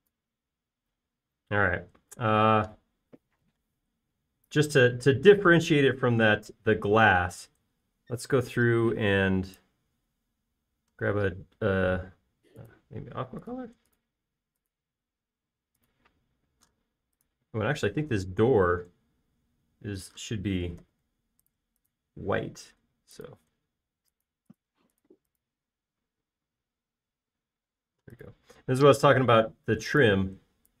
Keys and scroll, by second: 1.3 space, 4.8 b, 19.9 space, 22.3 b, 23.7 space.